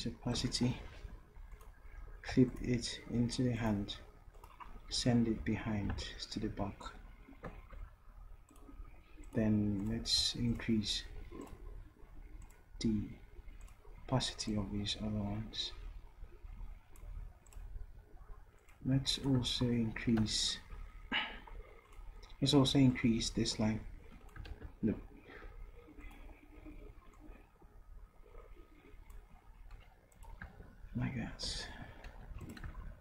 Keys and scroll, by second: 5.4 ctrl+Down, 6.0 ctrl+shift+Down, 20.2 d, 24.5 ctrl+z, 32.3 v.